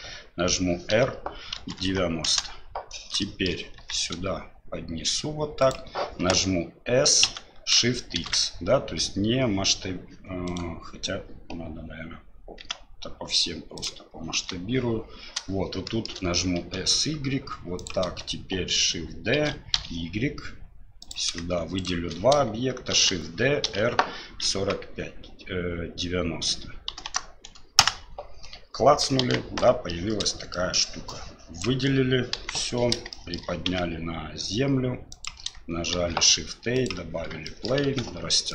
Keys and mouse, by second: 0.9 r, 3.2-3.6 shift+middle drag, 3.8 g, 7.3 s, 12.6 s, 14.3 KP_7, 15.9 shift+middle click, 16.6 s, 19.4 shift+d, 21.8 shift+middle click, 22.9 shift+d, 29.2 KP_1, 30.0 middle click, 30.5 middle click, 31.1-31.6 drag, 32.3 KP_1, 33.1 shift+drag, 33.7 g, 35.9 shift+a, 37.5 shift+click, 37.8 s.